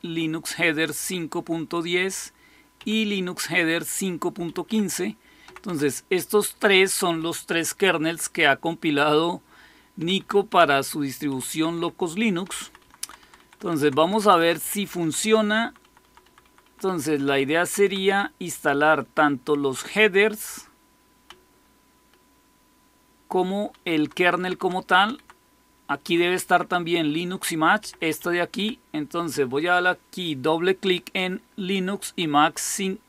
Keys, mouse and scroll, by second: 2.6 Down, 4.3 Up, 4.5 Up, 5.3 Down, 5.5 Down, 6.8 Up, 6.9 Up, 9.8 Down, 10.0 Down, 10.4 Down, 11.2 Up, 11.4 Up, 11.6 Up, 12.3 Down, 12.5 Down, 12.7 Down, 12.9 Down, 13.1 Down, 13.5 Down, 13.6 Down, 13.6 typing, 14.1 Down, 14.3 Down, 14.5 Down, 14.9 Down, 15.1 Down, 15.5 Down, 15.7 Down, 16.1 Down, 16.3 Down, 16.5 Down, 17.0 Down, 17.1 Down, 17.9 Down, 18.5 Up, 19.0-20.2 Up, 21.2 Down, 21.7-23.2 Down, 23.8 Down, 24.1 Down, 24.5 Down, 24.7 Down, 25.0 Down, 25.9 Down, 27.7 Up, 27.9 Up, 28.1 Up, 28.4 Up.